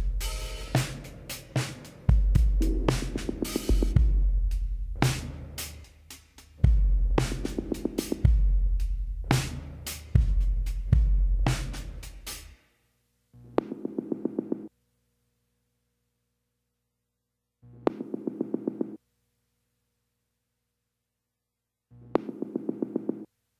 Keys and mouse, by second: 0.1 KP_1, 0.5 z, 1.1 middle click, 1.5 click, 1.7 KP_1, 2.7 click, 3.1 b, 4.0 click, 6.0-7.7 drag, 6.7 x, 8.1 z, 9.3 right click, 9.8 right click, 10.6 shift+s, 10.7 right click, 12.3 shift+a, 14.8 s, 17.6-19.4 drag, 19.4 s, 21.9-23.5 drag.